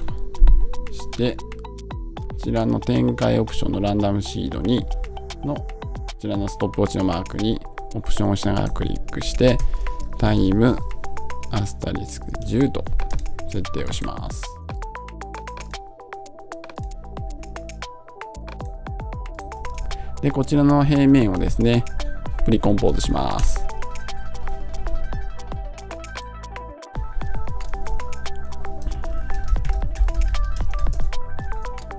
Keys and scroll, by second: 12.2 Home, 31.8 Up.